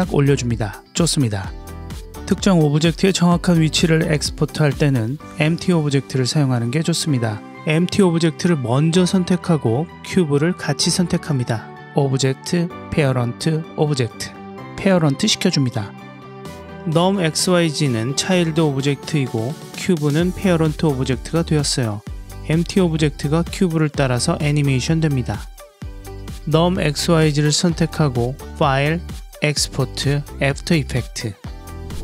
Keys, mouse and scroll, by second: 2.7 click, 4.0-5.2 drag, 6.3 click, 7.2 click, 8.3 click, 10.5-14.9 drag, 15.4 middle click, 16.1 click, 17.2-18.4 drag, 19.0 click, 20.4-24.0 drag, 27.5-30.2 drag.